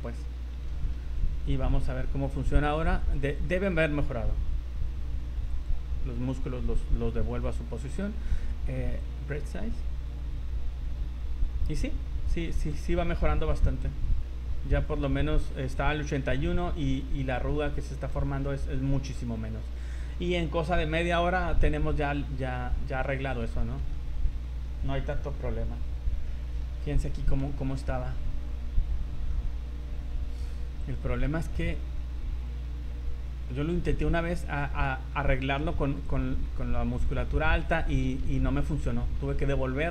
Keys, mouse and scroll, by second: 0.1 scroll down 2, 0.5 scroll up 1, 0.7 v, 1.2 middle click, 1.6 z, 3.3 click, 5.5 click, 9.0 click, 12.5 middle click, 13.2 middle click, 14.1 middle click, 14.1 middle click, 16.2 middle click, 17.2 scroll up 3, 17.5 middle click, 18.5 middle click, 18.8-19.2 scroll down 6, 19.5 scroll up 2, 23.0 scroll down 1, 23.5 shift+middle click, 23.9 middle click, 26.3 middle click, 26.6 scroll down 1, 26.8-27.2 scroll up 6, 27.5 shift+middle click, 27.6 shift+middle click, 29.3 middle click, 30.8 click, 33.4-33.7 scroll down 4, 33.7 middle click, 34.2 scroll up 3, 36.1 click, 38.4 ctrl+z, 38.8 middle click, 39.7 scroll up 2.